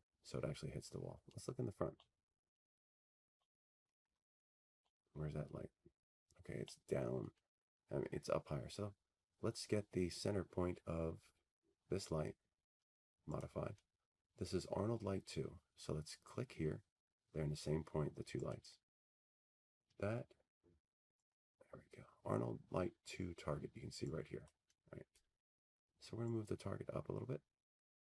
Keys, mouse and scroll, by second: 2.0 middle click, 2.1 middle click, 5.1 click, 6.6 middle click, 7.1 middle click, 8.2 middle click, 8.3 middle click, 8.7 middle click, 9.2 middle click, 9.5 middle click, 9.8 f, 11.2 middle click, 11.5 scroll, 12.8 scroll, 19.0 click, 22.0-23.9 scroll, 24.2 click, 26.9 click.